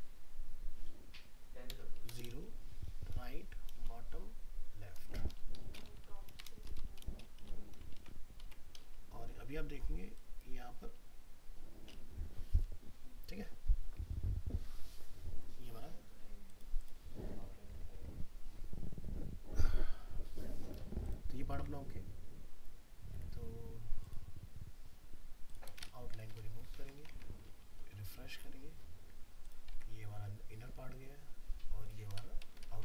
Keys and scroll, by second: 8.0 ctrl+s, 8.4 alt+Tab, 21.6 alt+Tab, 26.8 ctrl+s, 27.1 alt+Tab.